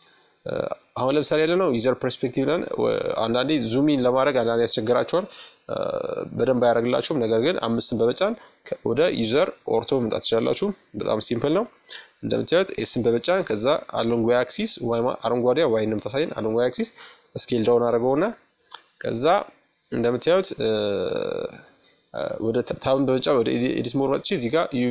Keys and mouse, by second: 1.2 KP_Add, 2.1 KP_Subtract, 8.3-10.8 middle drag, 15.9-18.5 middle drag, 20.5 Tab, 22.5-24.9 drag.